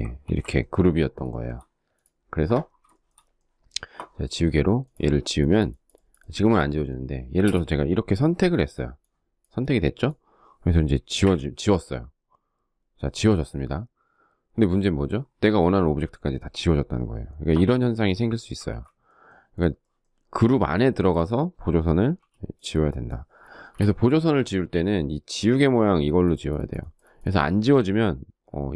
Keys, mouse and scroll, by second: 2.0 shift+middle click, 6.5 space, 10.2 Delete, 17.7 ctrl+z, 21.2 e, 22.6 space, 22.7 Escape, 27.8 space.